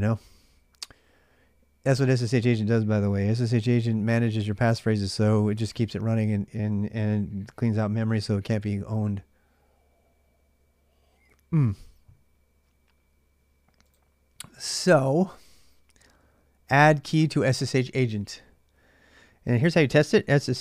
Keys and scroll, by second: 0.0-20.6 typing.